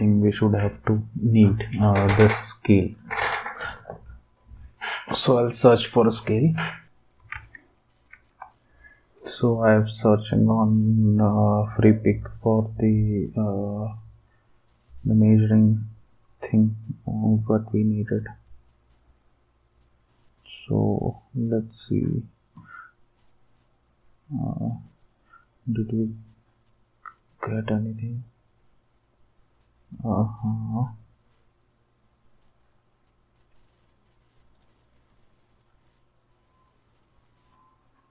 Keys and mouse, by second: 7.3 alt+Tab, 34.5 click.